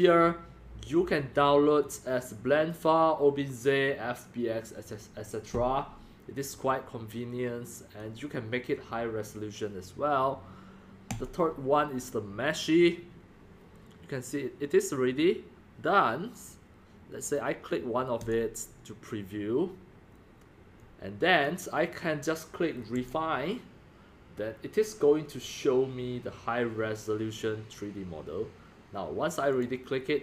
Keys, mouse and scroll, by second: 1.8 click, 3.0-3.4 drag, 4.7 click, 6.5-6.9 drag, 7.2 drag, 8.0 click, 8.2 click, 11.7-12.3 scroll down 2, 15.7-16.3 drag, 18.2 click, 19.9 drag, 20.3 drag, 20.8 drag, 21.3 click, 21.5-21.9 drag, 23.1 click, 23.5-23.9 drag, 27.9 drag, 29.5 click.